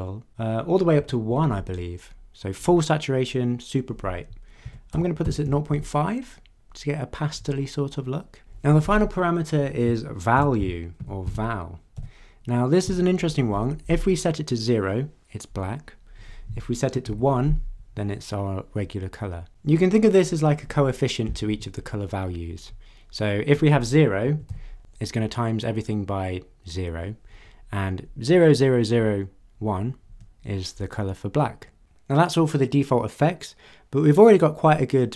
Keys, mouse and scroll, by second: 1.0 BackSpace, 1.3 1, 4.6-5.9 typing, 10.3-12.8 typing, 16.9 BackSpace, 17.1 1, 24.3 BackSpace, 24.5 0.